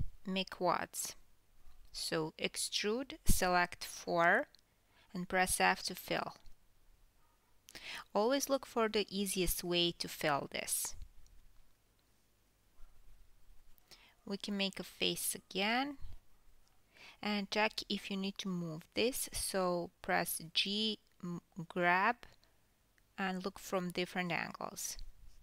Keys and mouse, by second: 0.0 click, 1.1 e, 3.6 click, 4.0-4.8 drag, 8.3 f, 9.9 KP_3, 12.2 g, 17.8-18.1 shift+drag, 18.1 shift+middle drag, 18.4 shift+click, 18.5-21.5 shift+middle drag, 19.8 f, 21.5 click, 21.6-25.4 middle drag, 23.3 KP_1, 24.5 e, 24.9 e.